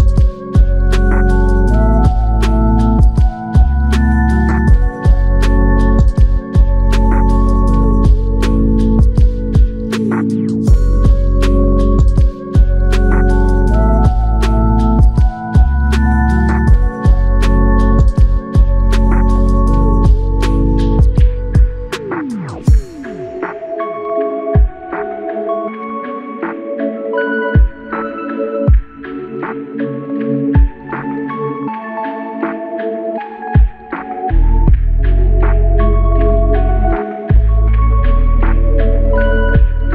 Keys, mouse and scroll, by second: 1.3 double click, 6.7 click, 6.9 alt+click, 9.6 double click, 12.2 alt+click, 13.2 shift+click, 17.0 alt+click, 22.4 alt+click, 25.0 ctrl+click, 31.4 double click, 33.6 alt+shift+click, 34.6 alt+click, 36.3 ctrl+click.